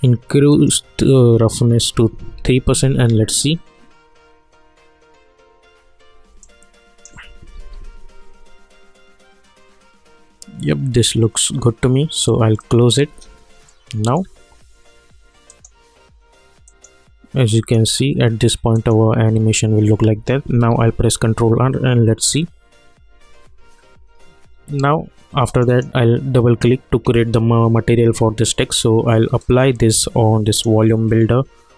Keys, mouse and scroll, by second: 0.5 click, 0.6 click, 2.2 ctrl+r, 5.1 -, 6.4 alt+right click, 7.5 ctrl+r, 12.6 click, 13.7-15.5 alt+middle drag, 15.5 click, 20.7 ctrl+r, 25.5 click, 29.4-31.7 drag.